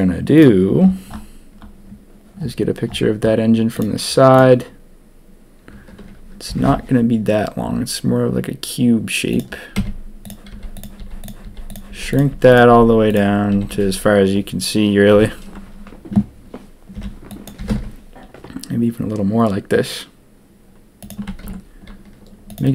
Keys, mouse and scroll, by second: 6.4 g, 9.7-13.7 typing, 16.9 b, 17.5 g, 21.4 ctrl+r.